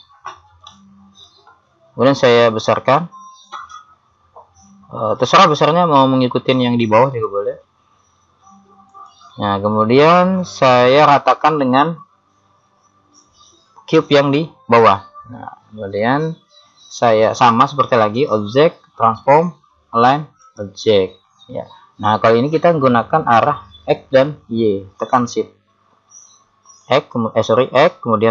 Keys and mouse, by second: 2.5 s, 13.9 right click, 26.9 click.